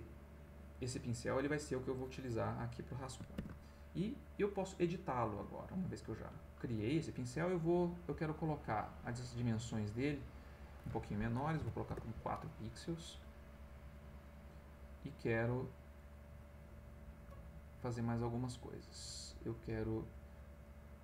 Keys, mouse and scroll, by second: 0.8 click, 1.1 middle click, 2.0 click, 3.3 ctrl+z, 4.7 click, 8.3 click, 10.2 right click, 11.6 4, 11.9 Return, 20.6-21.0 drag.